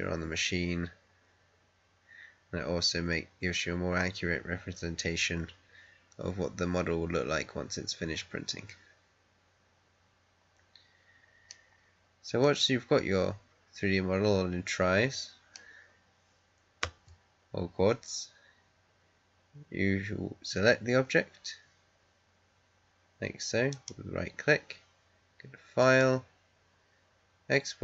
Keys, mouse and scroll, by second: 5.3 scroll up 1, 7.3 scroll up 1, 11.7-12.3 scroll down 1, 12.3-16.7 middle drag, 16.7 Tab, 18.5-20.3 scroll down 1, 23.6 right click, 25.7 click.